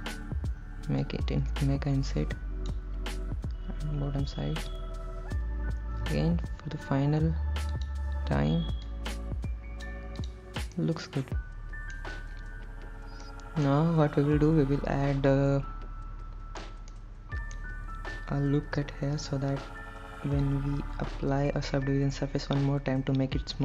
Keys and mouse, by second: 0.1 click, 1.3-2.9 drag, 8.0 click, 9.1-10.1 drag, 10.4 click, 11.0-12.2 middle drag, 13.5 middle click, 17.2 middle click, 19.4 ctrl+r.